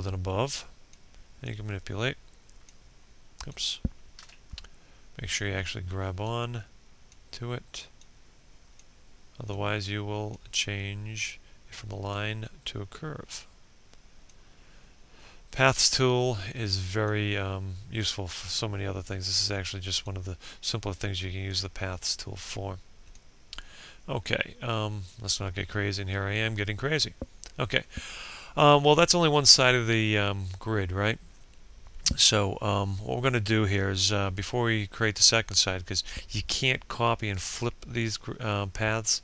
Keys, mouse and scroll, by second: 3.1 ctrl+z, 4.2-39.2 drag.